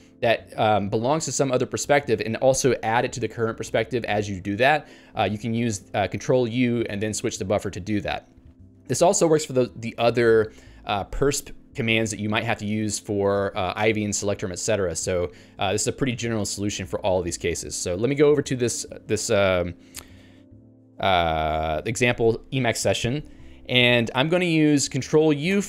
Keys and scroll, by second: 18.6 ctrl+g, 25.5 ctrl+alt+u.